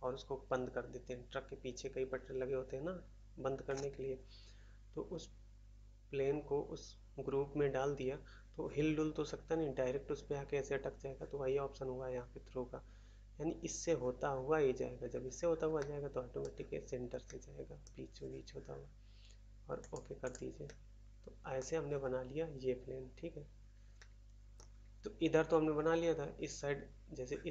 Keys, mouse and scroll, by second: 15.7 middle click, 16.4 middle click, 17.2 middle click, 17.8 middle click, 19.8 click, 19.9 click, 20.3 click, 20.6 middle click, 21.5 middle click, 23.9 middle click, 24.5 middle click.